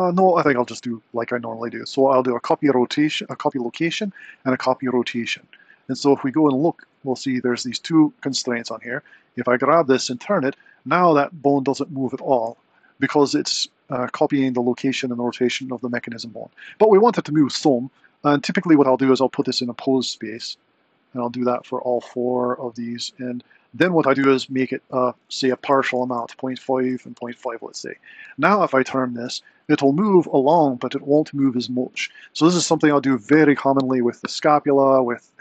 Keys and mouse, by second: 3.3 ctrl+shift+c, 9.3 click, 9.9 r, 12.6 click, 18.7 click, 20.3 click, 21.5 click, 22.4 click, 24.3-26.1 drag, 25.9 super+c, 28.2 click, 28.8 r.